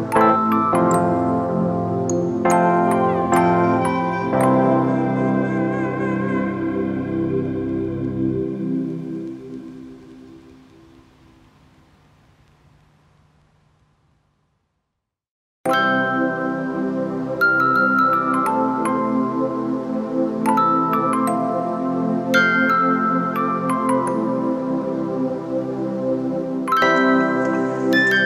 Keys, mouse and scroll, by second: 2.0 ctrl+click, 3.8 ctrl+click, 16.3 alt+shift+click.